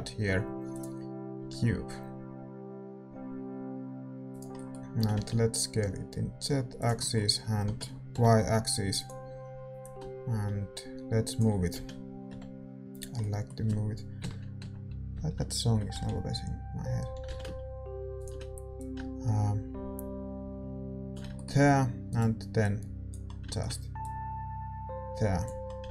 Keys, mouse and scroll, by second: 0.7 shift+a, 1.3 s, 4.5-9.8 middle drag, 5.0 s, 7.7 s, 9.8-11.7 drag, 11.7 s, 13.1-14.5 middle drag, 14.1 KP_1, 14.5 KP_3, 15.1 KP_1, 15.9 z, 17.1 s, 18.7-20.8 drag, 21.3-25.8 middle drag, 22.0-24.0 right drag, 22.6-25.9 drag, 25.8 z.